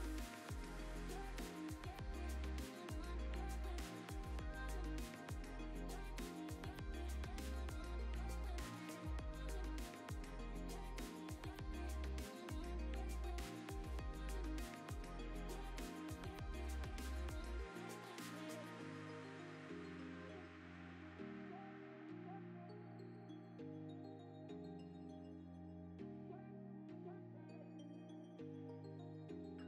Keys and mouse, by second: 0.0-0.5 typing, 0.2 middle click, 1.0 click, 1.9 drag, 2.0 g, 4.6 drag, 4.8 g, 5.5 click, 5.6 g, 7.3 click, 7.9 g, 8.6 click, 8.7 shift+click, 9.0 ctrl+p, 9.3 click, 9.5 click, 9.6 g, 10.4 s, 10.9 g, 13.1 click, 13.7-14.1 drag, 14.2 alt+d, 15.0-15.7 drag, 15.8 g, 17.5 alt+d, 17.9 s, 18.3 g, 19.0 alt+d, 19.4 s, 19.9 g, 20.8 g, 21.2 s, 22.0 click, 22.1 alt+d, 24.3 alt+s, 25.0 ctrl+z, 25.3 alt+d, 25.9 s, 26.1 g, 26.8 g, 28.1 click, 28.2 g, 28.9 s, 29.4 right click.